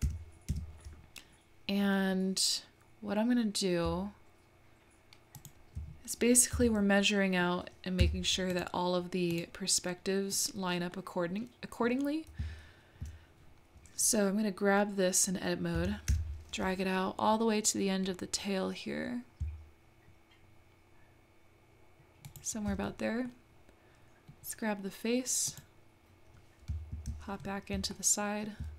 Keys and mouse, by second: 0.0 g, 6.5 Tab, 7.0 middle click, 8.0 3, 9.8 middle click, 10.9-13.0 middle drag, 15.8 g, 23.4-24.5 middle drag, 25.5 click, 28.0 shift+middle click.